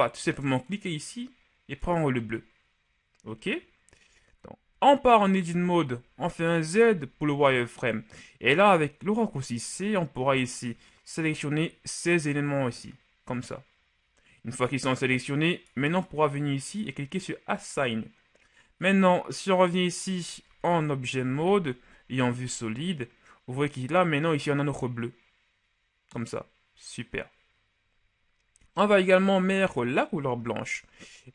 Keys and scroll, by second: 4.9 Tab, 6.1 z, 6.9 z, 9.3 [, 20.7 Tab, 21.5 z, 22.2 z.